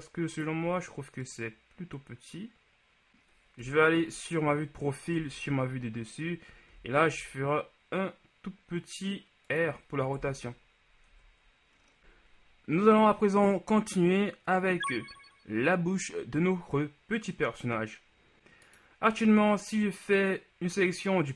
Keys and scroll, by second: 3.8 KP_3, 5.2 KP_7, 6.9 r, 7.2 z, 10.3 KP_1, 11.2 Tab.